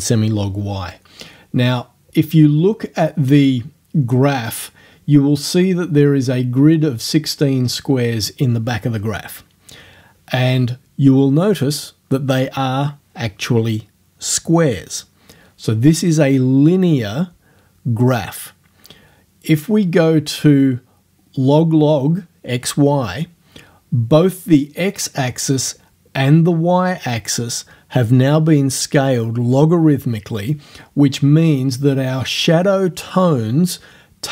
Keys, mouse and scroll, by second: 3.4 click, 20.2 scroll down 1.